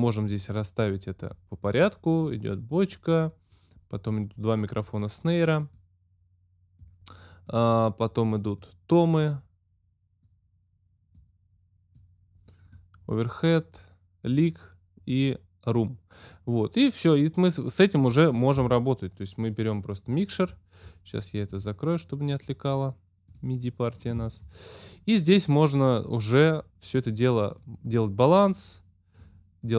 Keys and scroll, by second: 18.5 x.